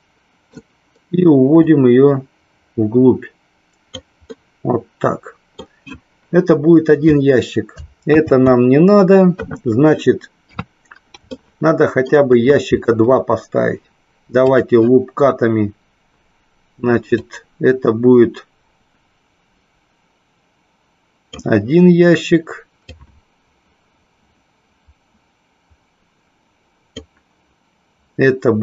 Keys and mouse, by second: 1.7-3.9 drag, 4.3-5.5 middle drag, 11.3 shift+middle click, 14.4 click, 17.2-21.3 drag, 22.9-26.9 drag.